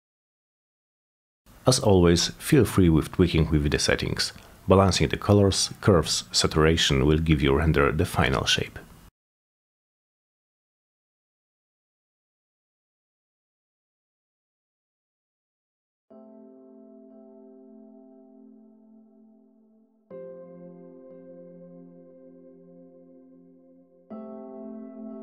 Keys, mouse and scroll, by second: 0.1 click, 0.6 click, 1.6 click, 1.9 click, 3.1 click, 3.3 click, 3.8-5.6 drag, 6.0 click, 6.4-7.8 drag, 8.2 click, 8.3 click, 8.8-9.8 drag, 10.0-11.0 drag, 11.3-12.4 drag, 12.9 click, 13.1-14.1 drag, 14.4-15.6 drag, 15.8 click, 16.7-17.5 drag, 18.0 click, 18.4 click, 18.9 click, 19.3 1, 19.6 BackSpace, 19.8 Return, 20.7 click, 21.1 Return, 21.6 click, 21.9 click, 23.1 click, 24.2 click, 24.9 Return.